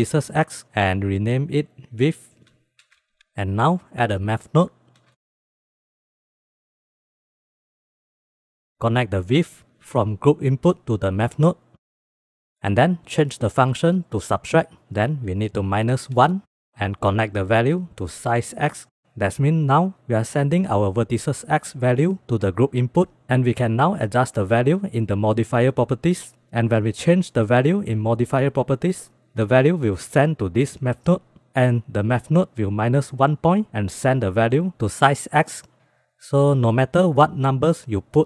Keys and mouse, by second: 1.5-3.3 shift+drag, 4.1 shift+a, 5.9 shift+a, 6.9-7.4 drag, 7.6 drag, 8.3 click, 8.7-11.8 drag, 12.1-12.5 drag, 13.1-14.2 drag, 15.8 click, 16.8-17.3 middle drag, 17.3-18.7 drag, 22.4-23.2 drag, 29.6-31.2 drag.